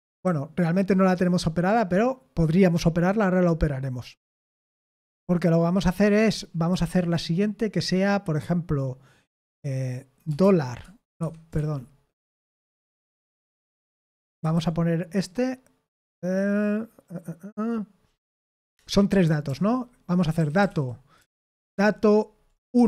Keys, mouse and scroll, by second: 0.2-0.9 typing, 10.4 shift+4, 11.2 Escape, 11.5 shift+-, 14.4 Escape, 14.5 k, 18.8-21.7 typing, 22.7-22.8 typing.